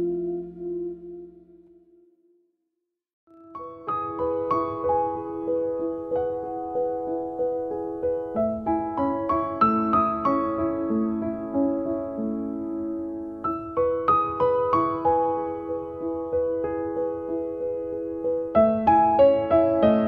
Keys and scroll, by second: 4.7 space, 15.9 t, 19.1 7, 19.8 Return.